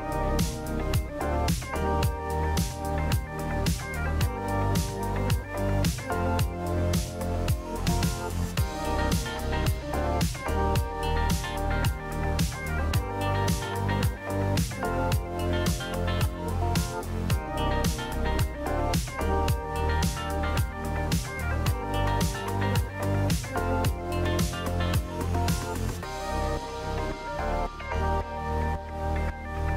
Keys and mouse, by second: 1.1 alt+z, 1.5 click, 2.0 alt+z, 2.2 click, 3.5 KP_3, 3.9 alt+z, 4.8 click, 6.2-7.2 drag, 8.1 ctrl+click, 8.7 alt+z, 8.9 middle click, 13.1 g, 16.3 alt+z, 17.0 ctrl+click, 17.5 alt+z, 17.8 middle click, 19.0 g, 20.3 alt+z, 20.6 Tab, 21.3 alt+z, 21.5-22.7 drag, 23.4 click, 24.8 KP_3, 26.0 shift+click, 29.3 shift+middle click.